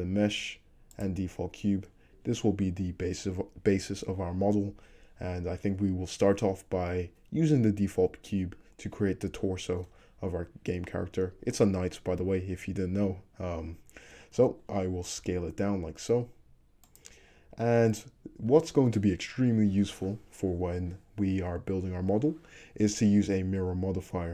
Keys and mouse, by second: 15.3 s.